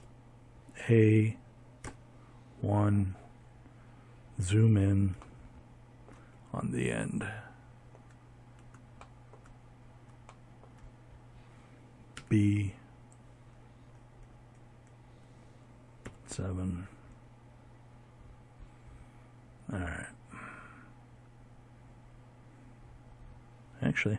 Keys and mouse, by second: 9.8 b, 13.7 KP_7.